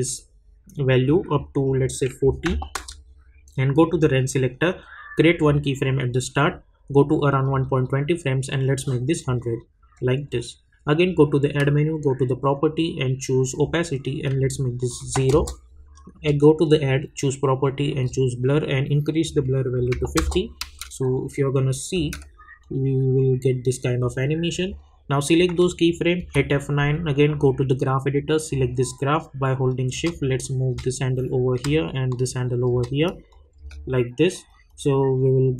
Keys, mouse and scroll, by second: 2.8 \, 3.8-9.9 drag, 13.5 click, 15.3 Return, 16.0 click, 20.1 Return, 20.6 space, 22.6-26.2 drag, 26.2 F9, 27.2-31.5 drag, 31.5-33.3 drag, 32.5 shift+click, 33.5 space, 34.7-35.5 drag.